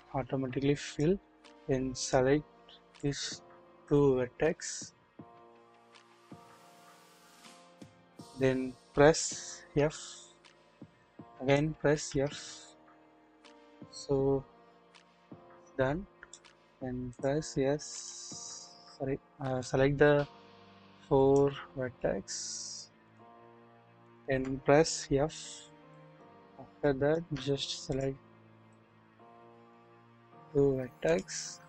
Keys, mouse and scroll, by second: 0.0 typing, 2.9 click, 9.7 f, 11.0 click, 12.7-13.2 typing, 13.2-15.3 middle drag, 15.3-16.3 drag, 19.5 click, 19.7 middle click, 19.9 click, 20.0 middle click, 20.0-21.5 drag, 22.0 shift+middle click, 23.0 shift+click, 24.3 shift+click, 25.0 f, 25.8 click, 26.8 shift+middle click, 28.7 middle click, 31.0 shift+click.